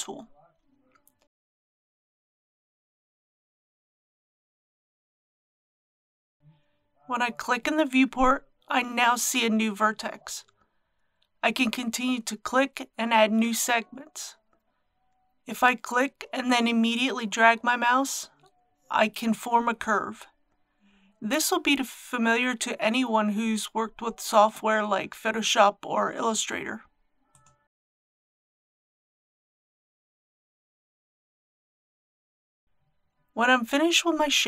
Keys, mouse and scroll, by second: 0.5-34.4 drag.